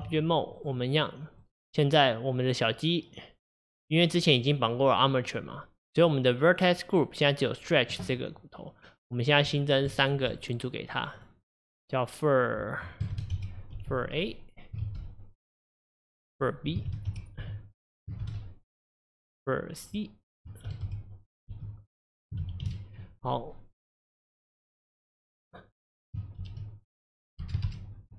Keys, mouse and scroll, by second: 0.1 Tab, 0.6 click, 1.0 click, 1.5 click, 9.5-11.1 drag, 15.8-18.9 drag, 19.1-24.9 drag, 25.0-28.1 drag.